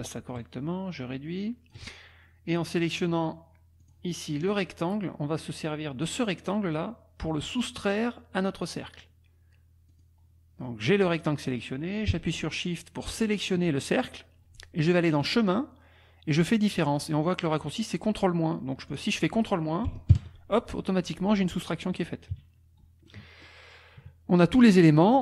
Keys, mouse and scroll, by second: 0.3-1.9 ctrl+shift+drag, 3.8 click, 4.5-6.2 drag, 9.9 click, 13.0 shift+click, 15.1 click, 19.0 click, 20.1 ctrl+KP_Subtract, 22.3 KP_Subtract, 23.0 click, 24.0 KP_Subtract.